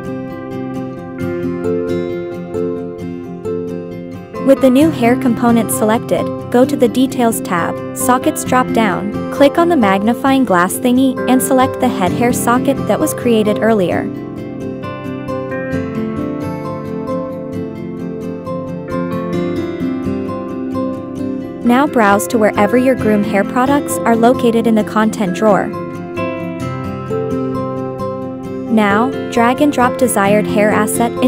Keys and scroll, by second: 0.3 1, 0.3 Return.